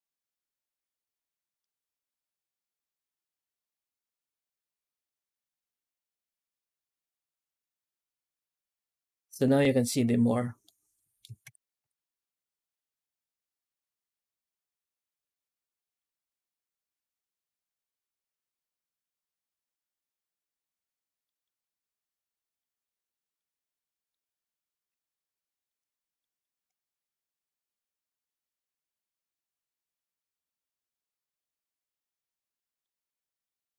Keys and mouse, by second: 1.5 click, 8.2 z, 10.5-11.1 middle drag, 11.4 ctrl+s, 11.7 z, 14.0 middle drag, 15.6 middle drag, 16.2 shift+middle click, 16.7 middle drag, 19.3 middle click, 20.2 middle drag, 20.5 middle click, 21.1 middle click, 22.3 middle drag, 23.1 middle click, 23.8 middle click, 24.9-25.3 shift+middle drag, 25.8 middle click, 26.3 shift+middle drag, 30.1 middle drag, 31.9-32.7 middle drag, 33.3 middle click.